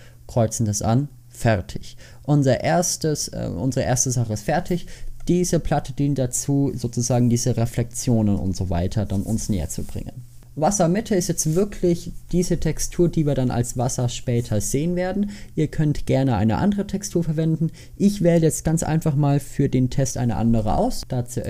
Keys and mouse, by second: 21.4 click.